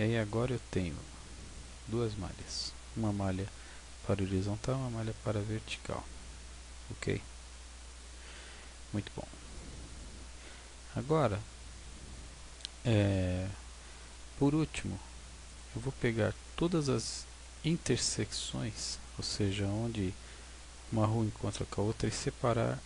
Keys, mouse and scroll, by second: 0.1 right click, 1.5 right click, 2.5-6.1 right click, 5.6 right click, 7.9 right click, 9.8 right click, 11.2 right click, 15.5 right click, 17.4 Tab.